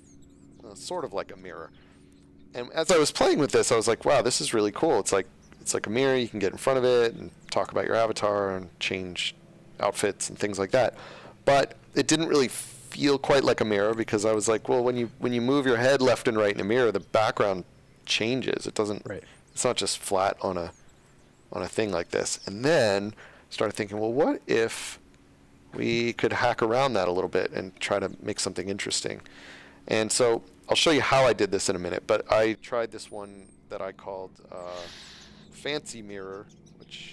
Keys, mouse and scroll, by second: 3.6 d, 4.0 s, 5.9-6.7 typing, 9.9-10.7 typing, 19.1 a, 19.6 d, 20.9 d, 21.9 s, 22.8 s, 24.4 s, 25.7 space, 28.7 click, 30.2 click, 35.9 click.